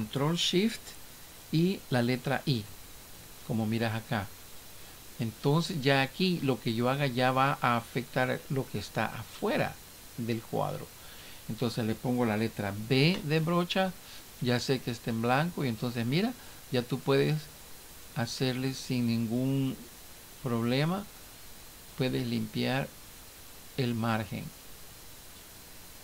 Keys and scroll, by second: 2.7 ctrl+shift+i.